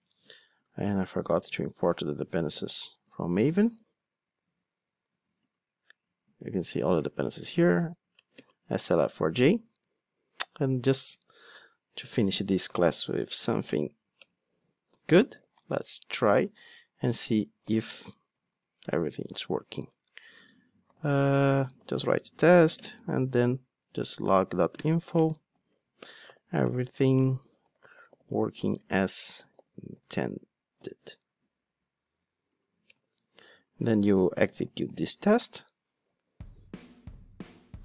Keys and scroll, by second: 2.6 shift+super+i, 8.4 ctrl+space, 8.9 Return, 10.4 Tab, 13.6 Return, 24.8 Return, 35.0 ctrl+shift+d.